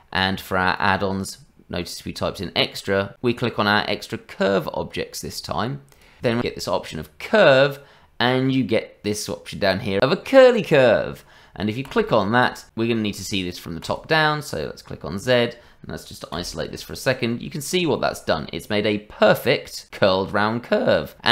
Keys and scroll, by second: 6.4 shift+a.